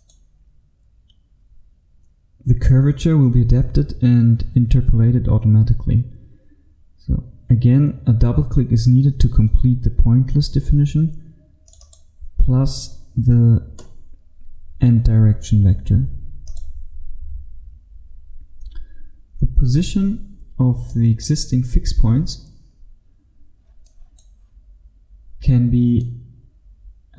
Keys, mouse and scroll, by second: 16.6 click, 19.9-20.9 scroll up 1, 20.9 click, 21.8-22.5 scroll up 1, 22.5-23.9 scroll up 1, 23.9 click.